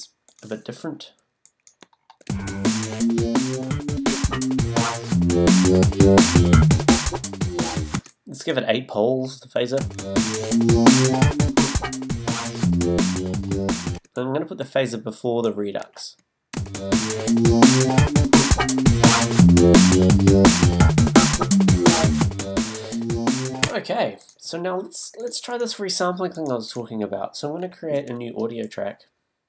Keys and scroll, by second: 3.3 space, 8.0 space, 9.8 space, 14.9 space, 23.6 space.